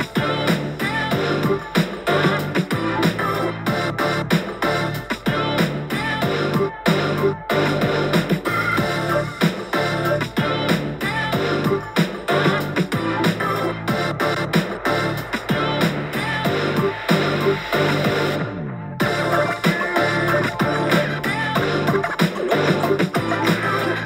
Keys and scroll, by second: 2.1 super+t, 7.0 super+t, 9.8 super+z, 9.9 x, 11.2 super+t, 14.4-15.7 typing, 17.4 super+t, 19.0-19.4 scroll down 7, 19.8-20.4 scroll down 9, 20.4 typing, 20.6 Page_Down, 20.9 Page_Down, 21.0 Page_Down, 21.1 Page_Down, 21.6 Page_Down, 23.5 Page_Down, 23.6 Page_Down, 23.6 Page_Down, 23.6 Page_Down, 24.0 super+t.